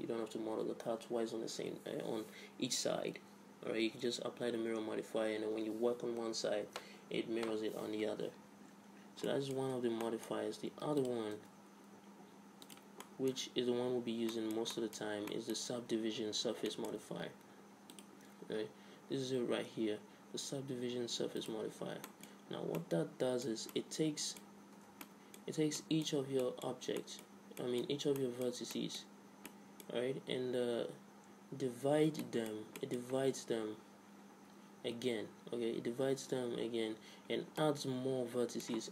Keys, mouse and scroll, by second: 8.9-10.3 middle drag, 9.6 Tab, 10.8 x, 11.3 click, 11.4 shift+a, 13.1-18.7 middle drag, 13.9 alt+r, 18.0-19.9 drag, 21.9-24.3 middle drag, 23.5 z, 24.4 middle click, 24.8 Tab, 28.9-31.4 middle drag, 32.3-38.9 middle drag.